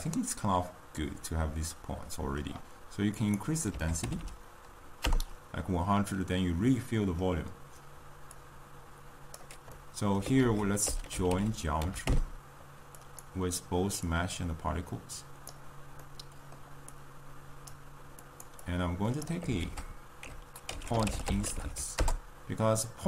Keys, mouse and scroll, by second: 5.0 0, 6.1-9.6 middle drag, 9.6 click, 10.1-13.1 middle drag, 13.1 ctrl+a, 15.6 click.